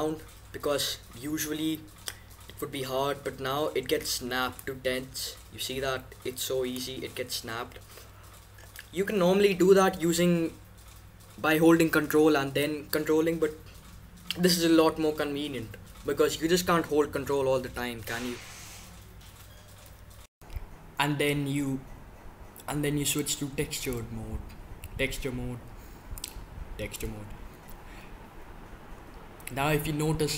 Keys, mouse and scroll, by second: 4.5-6.3 drag, 8.9-18.5 middle drag, 23.0-24.7 drag, 24.7-26.1 middle drag, 26.1-27.7 drag, 27.7-30.3 middle drag.